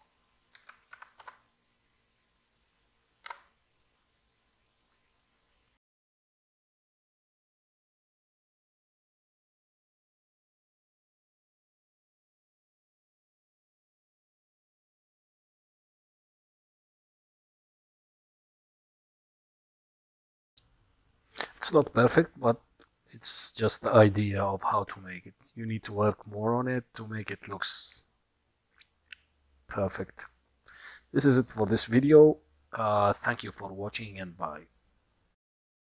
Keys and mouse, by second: 0.0-1.9 drag, 3.8 F12.